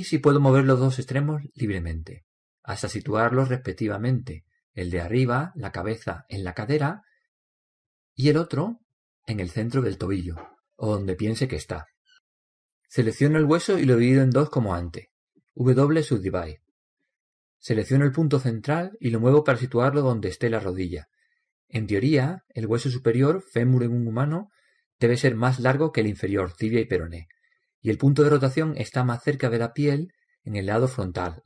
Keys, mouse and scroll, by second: 1.1-2.9 drag, 5.7-8.7 right drag, 7.5-9.2 drag, 9.3-11.1 right drag, 10.1-13.6 drag, 14.0-15.9 right drag, 15.3 w, 18.6-20.4 right drag, 19.7-21.5 drag, 22.4 click, 28.0 click.